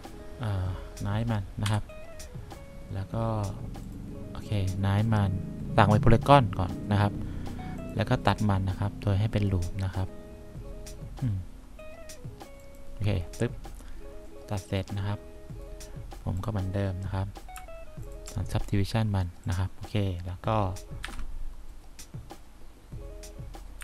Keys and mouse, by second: 1.7 c, 21.2 F4.